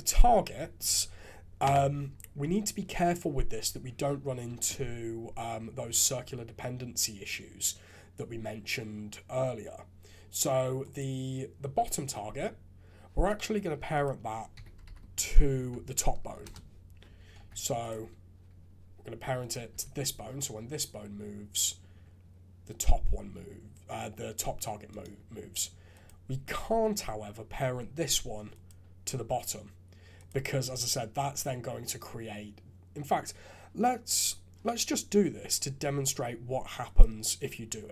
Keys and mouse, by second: 13.9-16.4 drag, 17.3 ctrl+Tab, 19.4 click, 19.7 g, 25.9 click, 30.2 click, 35.8 Tab, 36.9-37.9 drag.